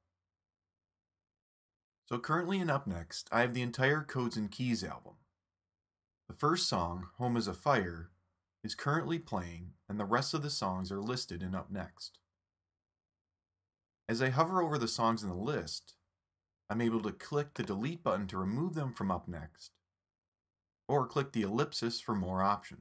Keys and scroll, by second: 1.0 alt+super+u, 2.8 alt+super+u.